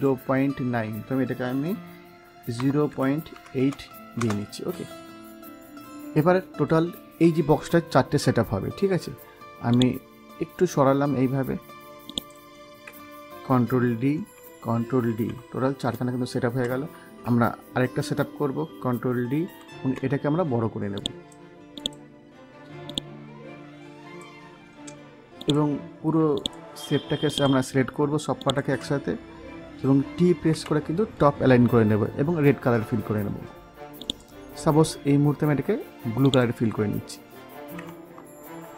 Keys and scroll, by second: 2.5 0, 3.2 8, 4.1 Return, 14.1 ctrl+d, 19.3 ctrl+d, 30.4 t, 38.5 ctrl+z.